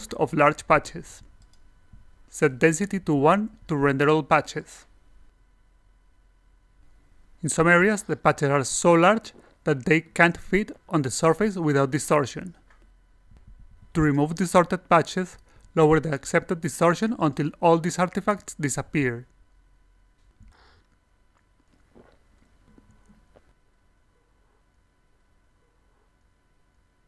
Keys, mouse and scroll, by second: 0.3 click, 1.4 click, 1.4 a, 2.4 click, 4.1-15.1 alt+drag, 16.3 click, 17.0 click, 18.3 click, 18.6 click, 19.8 click, 20.0 click, 20.8 click, 21.5 click, 22.2 click, 22.8 click, 24.8-26.3 alt+drag.